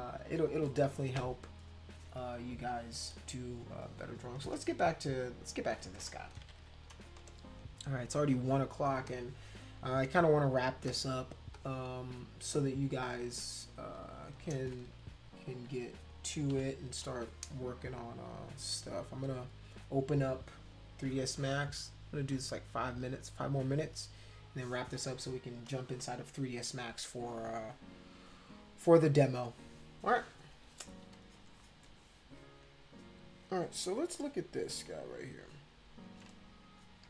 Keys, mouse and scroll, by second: 0.6 click, 4.3 space, 4.5-5.8 drag, 6.4 ctrl+=, 6.6 ctrl+=, 7.3 space, 8.3 click, 9.1 click, 10.0 click, 10.9 click, 11.5-12.9 drag, 13.1-14.3 drag, 15.5 ctrl+-, 16.5 ctrl+=, 35.1 click.